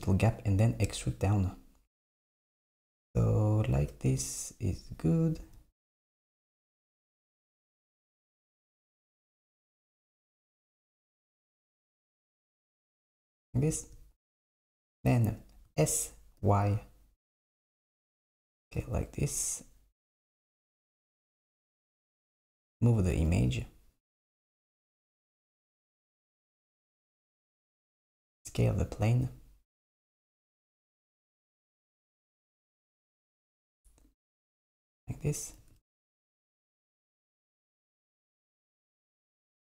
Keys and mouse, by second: 6.1 s, 10.2 click, 10.8 g, 14.7 click, 15.7 s, 20.7 s, 22.8 click, 23.2 g, 27.3 click, 28.2 s, 35.1 click, 35.6 g.